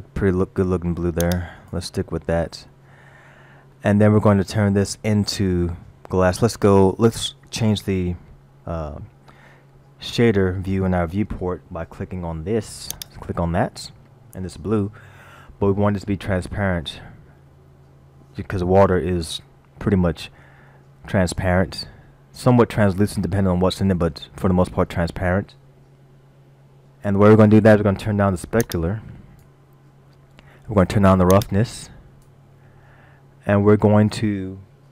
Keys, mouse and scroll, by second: 3.7 middle click, 13.4 click, 19.2 middle click, 28.7 click, 31.4 click, 32.9 middle click.